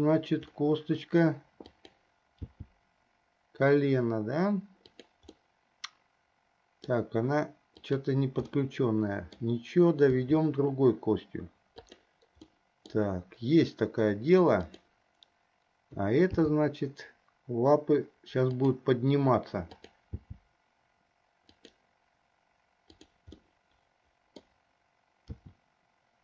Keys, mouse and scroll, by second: 2.0 drag, 2.8 g, 5.6-7.5 middle drag, 8.1-8.5 drag, 8.9-9.8 middle drag, 10.3 r, 12.8 middle click, 15.0 click, 16.6 g, 20.0 click, 20.5 g, 23.1 drag, 23.7-24.9 middle drag, 25.5 r.